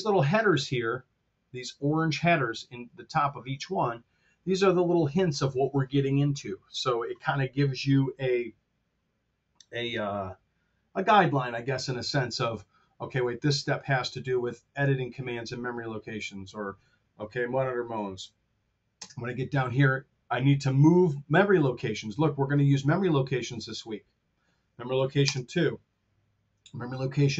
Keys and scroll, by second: 18.9 space, 25.2 space.